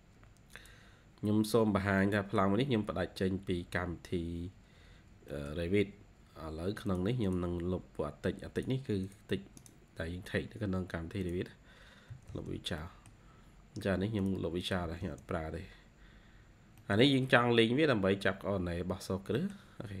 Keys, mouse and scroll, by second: 1.5-1.9 scroll down 1, 1.9 middle click, 2.3 scroll down 1, 2.8-4.3 scroll up 3, 5.2 middle click, 5.9-6.8 scroll up 3, 7.1 double click, 8.9 double click, 9.5 double click, 11.5-11.8 scroll down 1, 12.0 e, 12.5-12.9 scroll down 2, 12.7 middle click, 13.5-14.1 scroll up 1, 14.5 double click, 14.7 e, 15.9-17.1 typing, 15.9-16.4 scroll up 2, 16.7 middle click, 17.7-18.5 scroll up 1, 18.6-19.3 scroll down 3, 19.3 middle click, 19.5 scroll down 1.